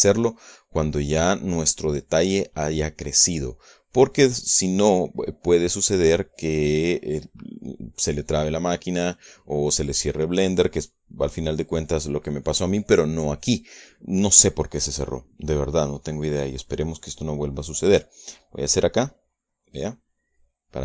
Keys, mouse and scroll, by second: 17.8 right click, 20.2 click.